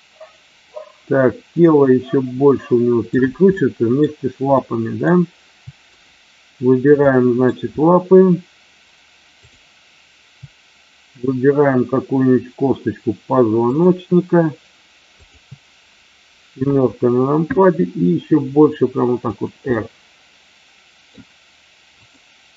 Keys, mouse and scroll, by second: 1.6-3.1 middle drag, 3.5 middle click, 4.5 middle click, 7.0 middle click, 9.4 click, 13.7 shift+click, 15.2 shift+click, 18.1 r, 19.2 click, 19.6-21.1 middle drag.